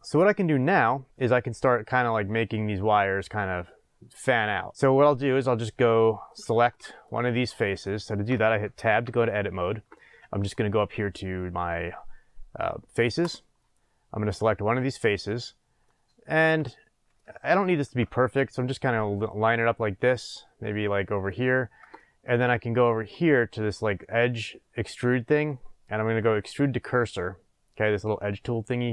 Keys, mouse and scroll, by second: 6.7-13.2 shift+middle drag, 7.1 scroll up 2, 8.8 Tab, 13.2 click, 14.3 click, 15.8-22.8 middle drag, 22.8-28.9 drag.